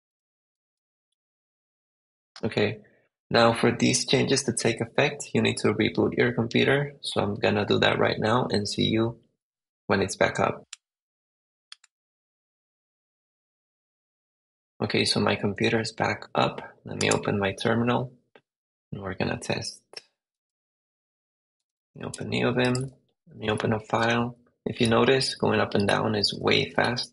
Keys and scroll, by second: 0.0 super+Tab, 0.6 super+v, 0.9 Return, 1.6 super+Tab, 21.3-27.1 typing.